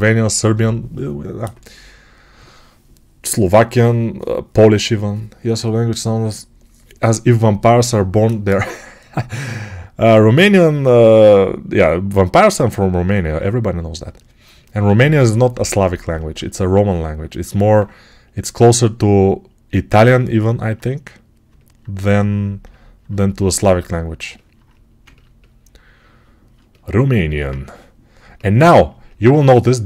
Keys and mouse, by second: 27.2 alt+q.